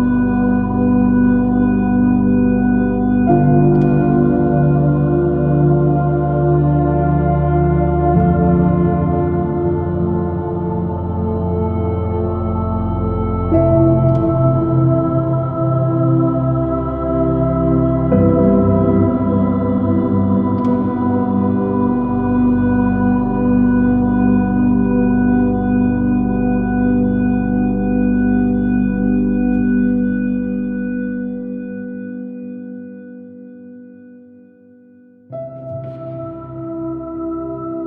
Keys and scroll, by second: 0.2 super++, 0.4 super+-, 10.9 space, 14.3 space, 15.7 super+z, 22.6 space, 23.8 j, 27.5 space, 30.5 space, 31.0 space, 37.4 super+space.